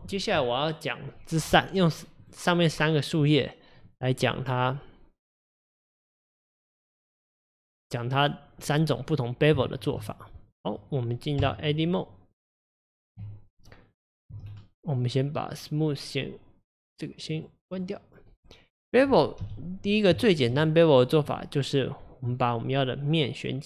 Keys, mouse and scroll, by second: 1.4 click, 1.8 click, 2.2 click, 2.7 click, 3.9 click, 4.2 click, 5.7 click, 6.9 click, 8.6 drag, 9.6-10.0 shift+middle drag, 10.0 drag, 10.6 click, 11.4 Tab, 13.7-14.5 scroll up 4, 14.5 scroll up 1, 15.8 click, 17.3 click, 17.7 click, 18.3-19.4 middle drag, 19.4 KP_1, 20.3 shift+middle click, 20.5 scroll up 4, 21.1 click, 21.4 middle click, 21.9-23.1 scroll down 2, 23.2 scroll down 2.